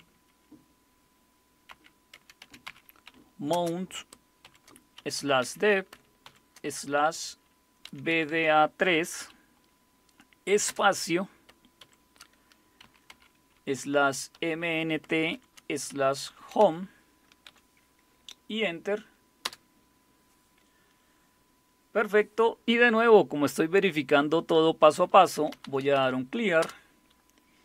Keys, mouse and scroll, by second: 1.7-6.2 typing, 7.8-9.2 typing, 10.7 typing, 11.8-13.1 typing, 14.3-17.5 typing, 19.2-19.9 typing, 25.1-26.4 typing, 26.6 Return.